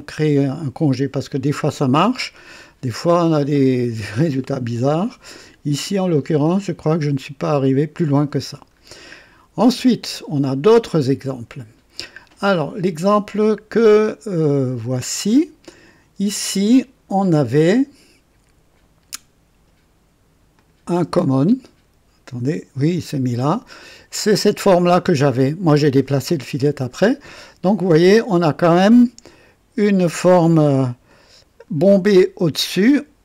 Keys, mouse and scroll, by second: 0.0 click, 8.4-8.8 scroll down 2, 8.9-9.8 right drag, 10.8-12.0 drag, 14.9 click, 16.8 scroll down 2, 20.5 click, 21.0 space, 23.1-23.9 right drag, 31.0-33.2 drag.